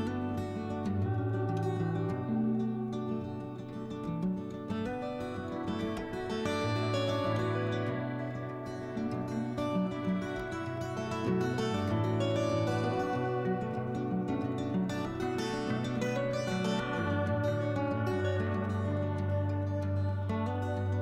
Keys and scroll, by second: 0.5 ctrl+z, 2.4 s, 5.1 s, 11.6 s, 13.9 s.